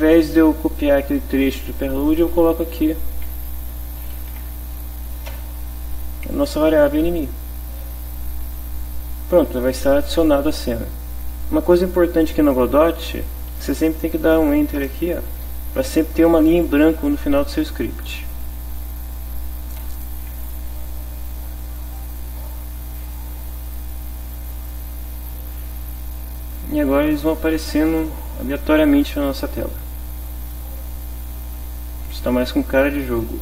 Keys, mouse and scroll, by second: 2.9-4.5 typing, 5.3 Return, 6.3 click, 8.1 click, 14.8 Return, 19.8 F5, 22.0 click.